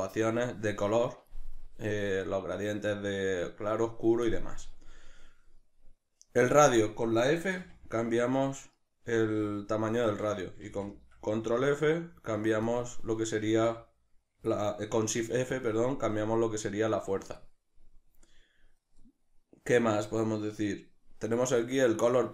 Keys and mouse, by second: 7.6-8.7 middle drag, 7.6 f, 8.7 right click, 9.2 f, 10.2 right click, 10.8 shift+f, 12.7 click, 13.4 shift+f, 15.6 click.